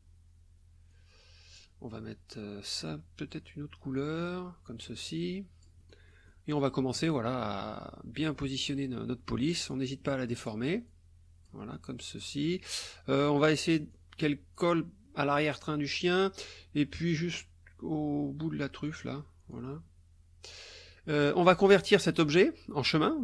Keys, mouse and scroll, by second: 0.9 click, 4.2 click, 5.0-6.5 drag, 6.9-8.8 drag, 9.7 click, 10.9 click, 12.2 click, 13.9 click, 16.4-19.2 drag, 19.5-20.6 drag, 20.9-21.3 drag.